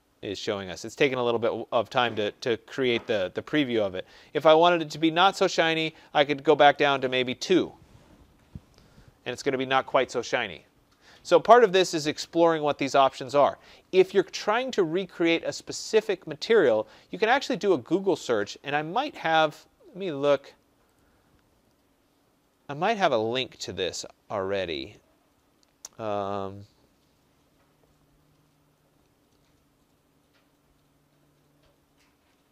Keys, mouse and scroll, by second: 6.1-7.2 typing, 8.1 Tab, 16.6 click, 18.2 click, 20.4 click, 20.9 click, 23.9 middle click, 24.0 middle click, 24.6 middle click.